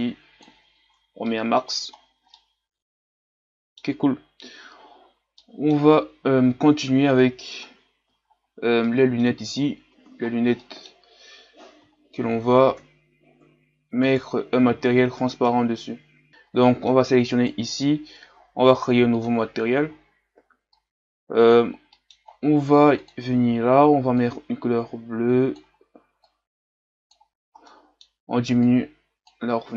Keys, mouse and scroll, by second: 0.9 scroll down 4, 1.2 middle click, 2.0-2.3 scroll down 2, 2.3-4.7 middle drag, 4.7-5.4 scroll up 3, 5.4 middle click, 5.9-7.5 scroll up 2, 7.5 scroll up 1, 7.7-8.2 scroll down 1, 8.2-8.8 scroll up 2, 8.8-10.3 middle drag, 10.3-10.6 scroll down 2, 10.6 middle click, 11.5-12.8 scroll up 1, 12.8-16.3 scroll up 1, 16.3-16.7 scroll up 1, 16.7 middle click, 17.4-19.6 right drag, 19.6-26.2 drag, 28.7-29.7 drag.